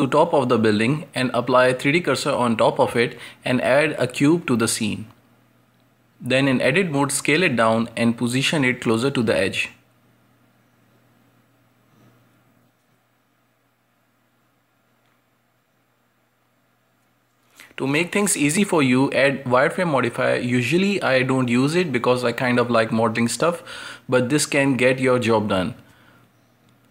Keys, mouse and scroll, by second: 0.0 shift+`, 4.0 click, 4.4 shift+a, 6.8 Tab, 8.3 s, 9.3 g, 9.9 Tab, 10.2 g, 11.2-11.5 scroll down 1, 11.5-12.9 middle drag, 12.9 KP_Decimal, 13.6-14.1 scroll down 8, 14.1-14.8 shift+middle drag, 14.8 scroll up 1, 14.9 g, 15.9 g, 17.2-18.4 middle drag, 18.4 ctrl+space, 19.8 click, 20.8-24.2 drag, 24.2-24.9 shift+middle drag, 24.9 scroll up 1, 25.1-26.0 middle drag, 26.0 Tab, 26.3-26.9 scroll up 1.